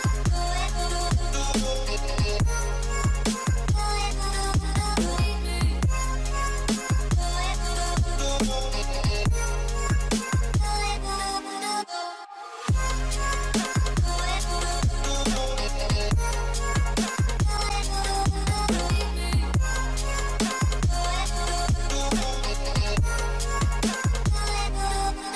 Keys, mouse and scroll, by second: 0.0-0.4 typing, 2.6-3.3 typing, 5.5 typing, 6.9-9.3 typing, 10.8 typing, 12.7 scroll down 1, 13.5-15.8 typing, 18.8 scroll down 1, 21.6 scroll down 1, 23.5 double click, 23.8 scroll down 1, 24.0 scroll up 1, 24.2 scroll down 1.